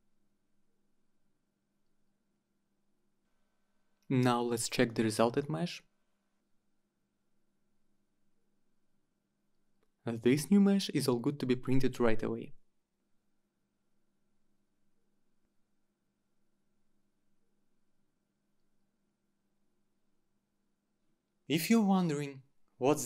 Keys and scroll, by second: 3.6-5.7 typing, 7.2 Return.